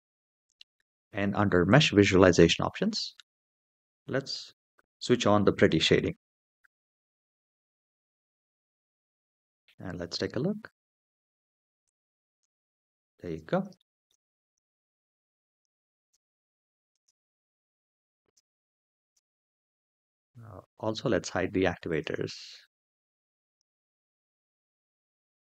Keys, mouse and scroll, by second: 1.5 click, 3.1 scroll down 2, 5.3 click, 6.8-9.3 middle drag, 9.6 click, 9.8-10.9 middle drag, 11.6 click, 12.1 space, 13.0 space, 13.5 shift+middle drag, 15.3 click, 15.8 space, 16.7 space, 17.4 click, 18.0 space, 18.8 space, 20.4 scroll up 2, 21.7 click, 23.3 click, 25.1 click.